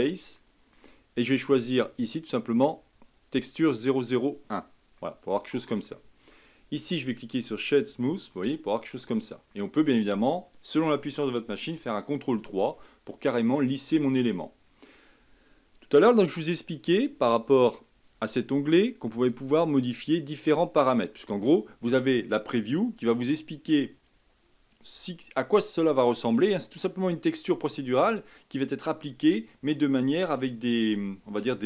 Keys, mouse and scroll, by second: 0.4-1.8 middle drag, 1.8-4.9 drag, 5.0-6.4 middle drag, 6.4-7.9 right drag, 7.9 scroll up 2, 8.5 scroll down 2, 9.0-12.1 middle drag, 12.5 ctrl+3, 13.0-16.1 middle drag, 18.0 click, 19.0-20.0 scroll down 4, 20.3-23.6 scroll up 4.